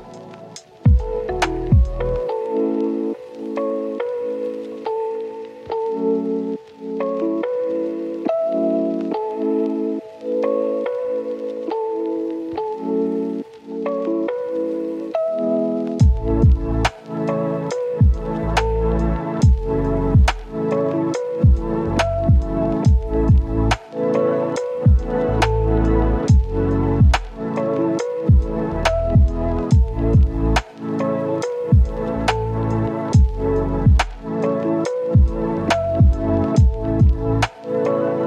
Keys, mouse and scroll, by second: 0.2 click, 0.4-0.8 scroll up 1, 0.8 right click, 1.8-2.3 scroll up 1, 2.3 click, 2.4 scroll down 1, 2.5 scroll up 1, 2.6 right click, 3.1 click, 3.7 scroll down 1, 4.0 click, 4.1-5.8 right drag, 5.8 scroll down 1, 5.9 scroll up 1, 6.0 right click, 8.0 click, 8.7-11.2 right drag, 11.2 scroll up 1, 11.4 right click, 12.5 click, 13.4 right click, 14.8 scroll down 1, 14.9 scroll up 1, 14.9 right click, 15.4 scroll down 1, 15.5 scroll up 1, 15.6 right click, 16.0 scroll up 1, 16.3 right click, 16.6 click, 18.3 right click, 18.6 click, 18.7 scroll down 1, 18.8 scroll up 1, 18.9 right click, 19.4-19.7 scroll up 1, 19.7 click, 20.2 right click, 20.8 click, 21.4 scroll down 1, 21.5 right click, 22.2 click, 22.5-23.0 scroll down 1, 23.0 scroll up 1, 24.1-26.3 drag, 26.5 scroll down 1, 26.6-27.0 scroll up 1, 27.0 click, 28.0 scroll down 1, 28.1-28.5 scroll up 1, 28.5 click, 30.1-30.8 scroll up 1, 30.8 click, 31.1-32.6 right drag, 32.6 scroll up 1, 32.8-34.8 right drag, 34.8 click, 35.0 right click, 35.7 click, 36.3 scroll down 1, 36.4-37.8 right drag, 37.9 scroll up 1, 38.0-38.2 right drag.